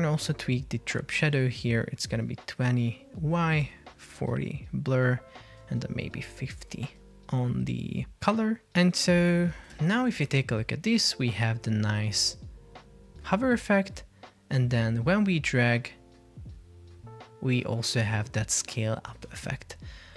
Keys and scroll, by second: 19.4 Escape.